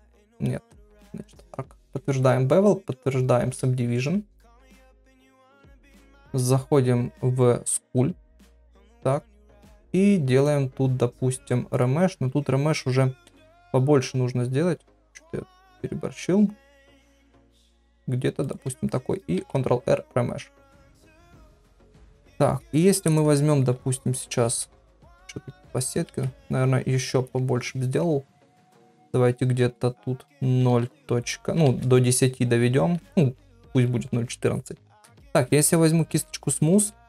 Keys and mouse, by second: 0.7 click, 2.1 ctrl+a, 3.5 ctrl+a, 5.9 Tab, 6.2 Tab, 8.6 ctrl+Tab, 10.4-12.0 drag, 13.2 shift+r, 20.1 ctrl+r, 21.0 middle click, 23.7-24.1 ], 24.9 Tab, 24.9 ], 25.5 Tab, 26.1 shift+r, 28.3 shift+r, 29.6 shift+r, 30.7 shift+r, 31.6 shift+r, 35.2 ctrl+r.